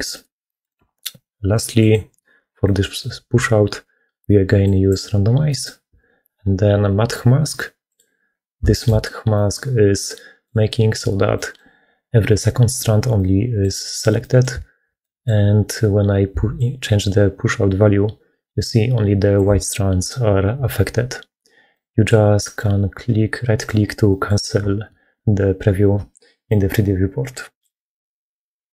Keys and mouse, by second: 0.1 click, 0.5 middle click, 2.5 middle click, 4.6 click, 5.4 middle click, 7.8 click, 8.6 shift+middle click, 9.2-10.3 middle drag, 11.2 middle click, 13.0 middle click, 14.1 middle click, 14.9 middle click, 16.5-19.3 shift+middle drag, 21.6 middle click, 23.5 click, 24.0 middle click, 26.4-27.5 middle drag.